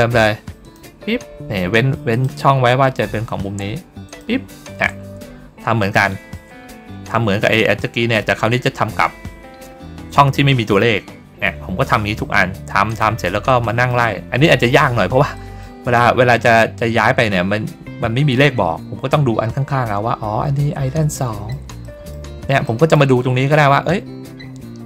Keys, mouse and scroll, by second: 0.5 click, 2.0 click, 4.0 click, 5.7 shift+click, 8.3 middle click, 12.8 click, 13.4 middle click, 15.2 middle click, 16.1 ctrl+middle click, 21.0 middle click, 21.7 middle click, 22.5 middle click, 23.4 ctrl+scroll up 1, 24.5 ctrl+scroll down 1.